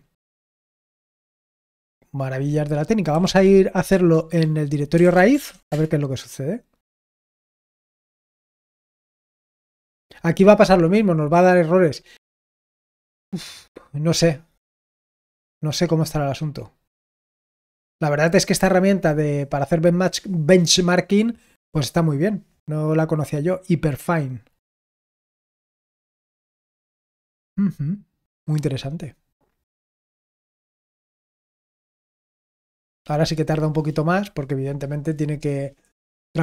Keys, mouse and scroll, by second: 0.6 click, 2.9-5.9 typing, 7.3 ctrl+p, 7.6 ctrl+p, 8.0 ctrl+p, 9.4 Return, 23.3-24.6 scroll down 1, 24.6-25.1 scroll down 1, 25.1-30.5 scroll down 1, 30.5-36.4 scroll down 1.